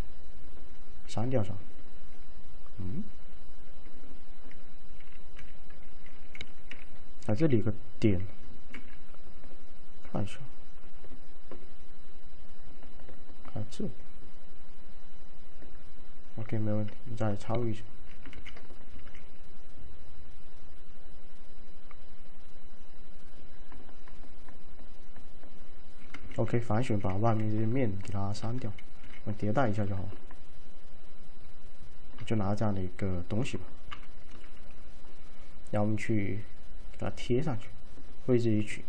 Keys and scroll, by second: 7.3 1, 8.8 alt+f, 18.4 ctrl+a, 19.1 alt+a, 26.4-27.4 typing, 29.1 z, 35.9 F5.